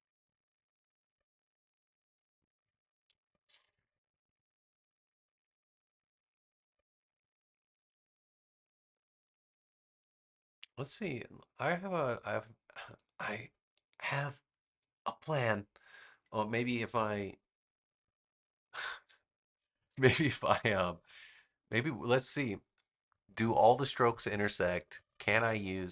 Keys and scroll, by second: 3.3 a.